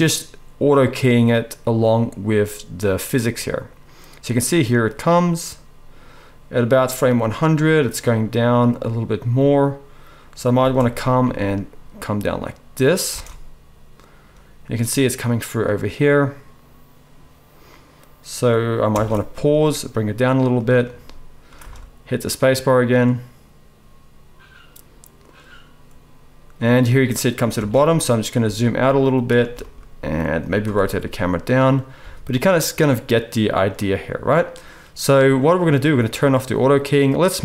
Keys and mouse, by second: 10.7 space, 11.2 g, 13.1 space, 19.1 space, 19.3 g, 21.5 space, 27.7 space, 28.4 g, 29.4 g, 30.7 r, 32.0 g.